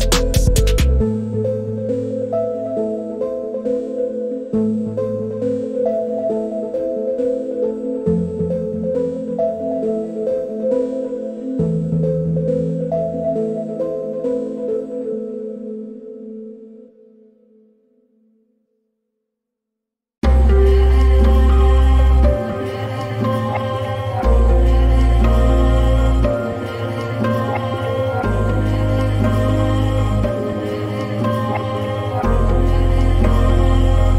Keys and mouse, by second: 1.1 click, 2.3 click, 5.9-6.9 drag, 12.7-14.0 drag, 15.0-16.0 drag, 18.1 click, 21.3-22.3 drag, 21.8 KP_0, 25.9 middle click, 29.8-31.6 drag, 32.8-34.0 drag.